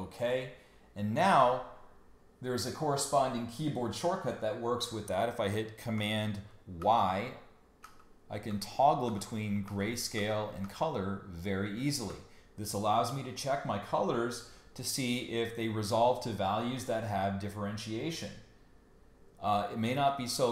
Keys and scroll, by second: 6.8 super+y, 7.8 super+y, 10.6 super+y.